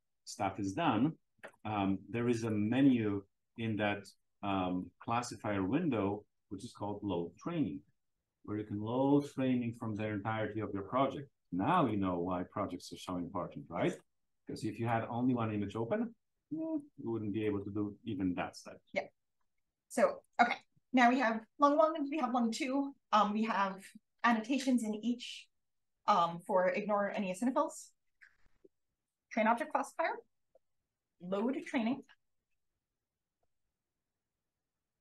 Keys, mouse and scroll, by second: 0.9 click, 2.4 click, 11.6 click, 12.4 click, 13.5 click, 16.7 click, 19.0 click, 20.1 click, 20.4-28.7 drag, 32.5 click, 33.2 click.